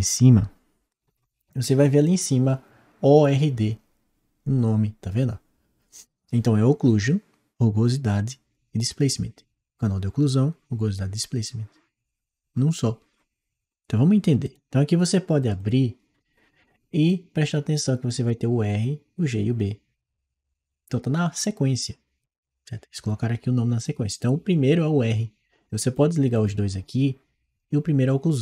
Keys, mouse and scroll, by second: 14.3-15.5 drag, 16.9-22.1 drag, 25.7 click.